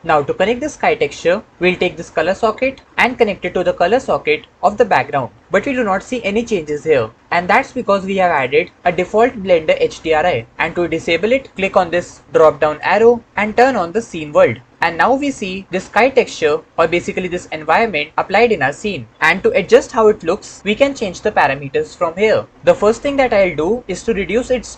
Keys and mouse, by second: 3.0-5.0 drag, 12.6-14.7 drag, 19.1 KP_0.